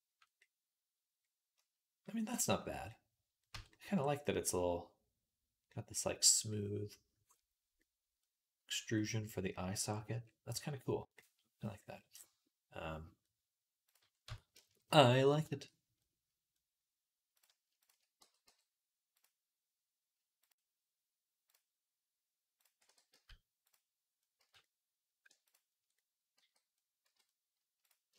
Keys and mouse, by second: 2.0-4.7 middle drag, 3.4 Tab, 4.7-9.0 middle drag, 10.5 middle click, 10.6-13.4 middle drag, 13.4-15.1 drag, 14.1 Tab, 15.5-17.8 middle drag, 18.0 g, 22.7 e, 24.2 z, 25.7 click, 25.8-28.1 middle drag, 26.3 f, 26.9 z, 28.1 alt+shift+click.